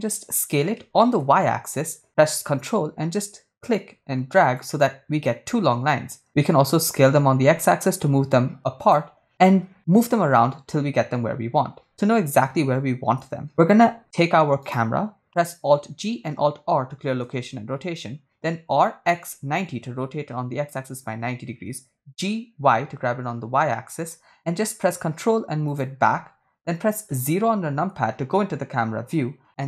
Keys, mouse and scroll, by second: 0.0 s, 2.0 y, 4.9 ctrl+click, 7.1 s, 7.3 x, 9.0 ctrl+click, 14.7 Tab, 15.6 right click, 16.3 alt+g, 16.5 alt+r, 18.0 r, 19.0 x, 19.2 9, 19.7 0, 20.3 Return, 21.7 g, 22.8 y, 23.3 z, 24.2 y, 25.9 ctrl+click, 27.6 KP_0.